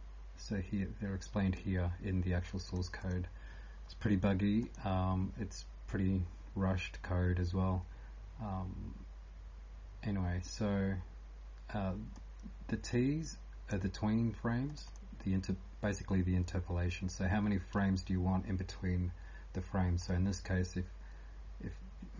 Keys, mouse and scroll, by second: 0.0-22.1 typing, 14.7 click, 14.9 click, 20.0 click.